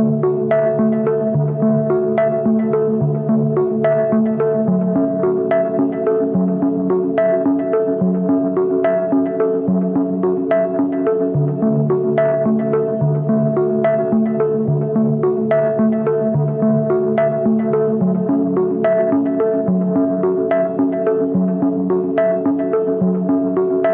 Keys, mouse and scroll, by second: 10.5 double click, 22.3 double click.